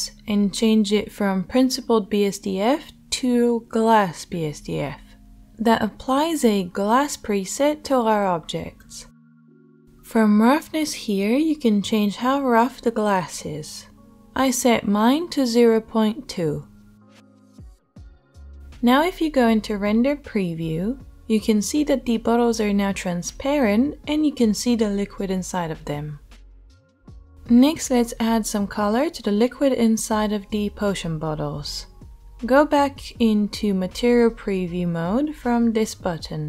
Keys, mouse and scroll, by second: 19.0-36.4 right drag.